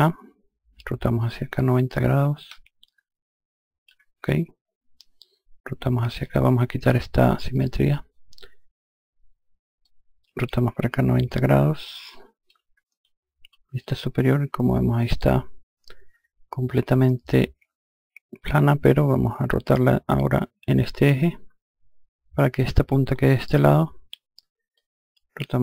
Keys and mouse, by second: 0.7 click, 7.0 click, 9.3 click, 12.9 F2, 24.2 click.